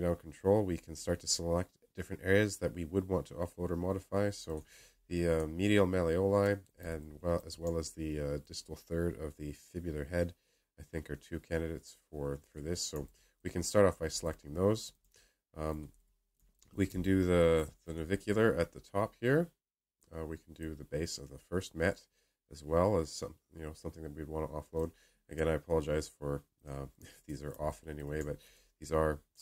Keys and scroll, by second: 16.8 space, 17.3 space.